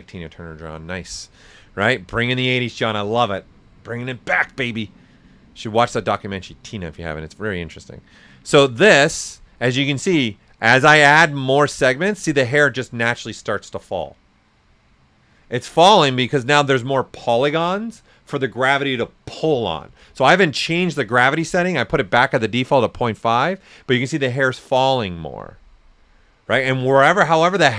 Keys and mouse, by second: 7.4-11.6 drag, 12.6 right click, 26.8 alt+right click.